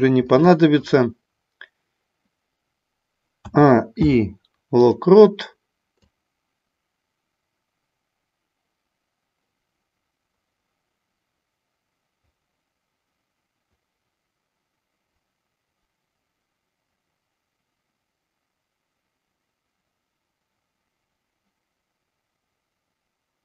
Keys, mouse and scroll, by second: 3.5 a, 4.0 i, 6.1-23.4 drag.